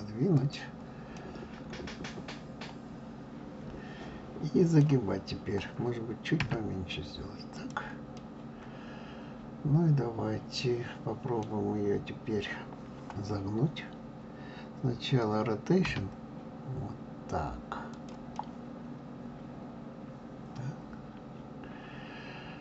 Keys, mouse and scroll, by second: 1.2-4.2 middle drag, 6.4 s, 8.1-11.3 middle drag, 15.8 r, 18.3-21.4 middle drag.